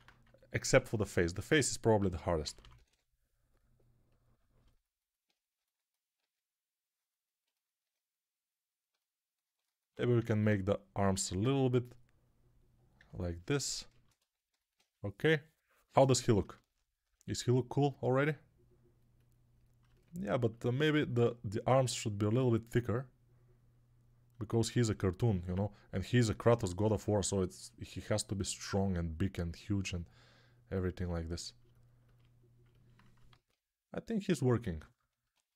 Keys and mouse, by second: 1.9-2.7 typing, 6.5 alt+q, 25.3 alt+q, 33.2 alt+q.